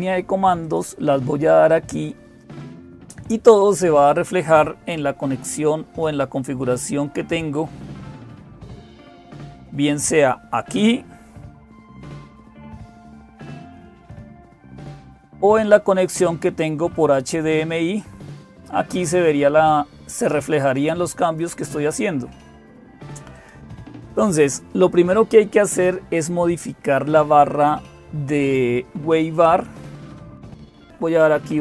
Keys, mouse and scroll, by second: 0.0-31.6 typing, 0.4 click, 8.0 click, 13.5 super+9, 17.0 click, 21.0 click, 23.1 click.